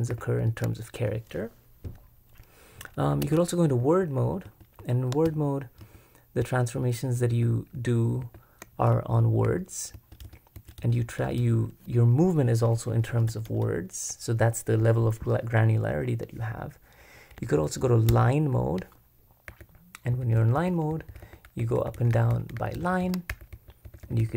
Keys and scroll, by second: 0.0-0.1 typing, 3.2 super+r, 3.8-8.2 typing, 9.4-11.4 typing, 12.6-13.6 typing, 18.1 super+l, 19.5-21.7 typing.